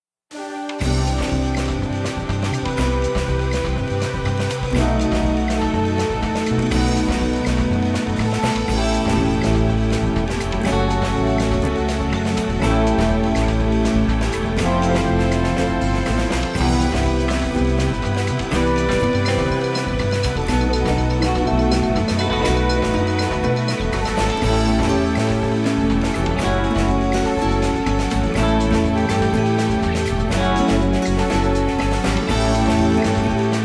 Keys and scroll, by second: 0.6 ctrl+z, 0.7 space, 5.1 ctrl+z, 5.4 space, 7.4 ctrl+z, 8.6 space, 11.4 space, 12.5 ctrl+z, 17.7 ctrl+z, 18.3 space, 20.4 space, 21.2 space, 22.7 space, 26.7 space.